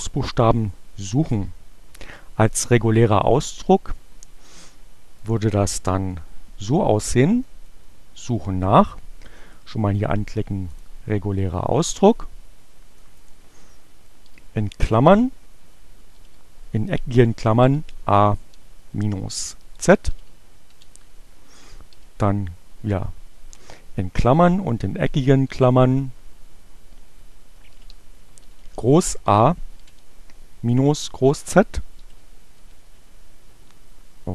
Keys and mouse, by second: 5.0-6.4 drag, 7.5 click, 10.0-11.1 drag, 13.1 click, 14.3 shift+8, 14.8 alt+8, 16.8-17.8 typing, 19.5 alt+9, 22.0 shift+8, 24.6 super+8, 27.2 alt+8, 29.4 -, 29.8 shift+z, 32.1 alt+9.